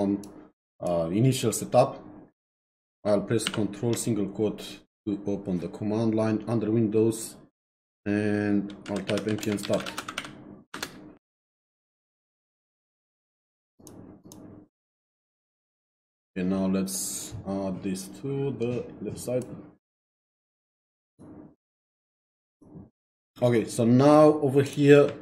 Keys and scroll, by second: 3.4 ctrl+', 8.6-10.7 typing, 10.7 Return.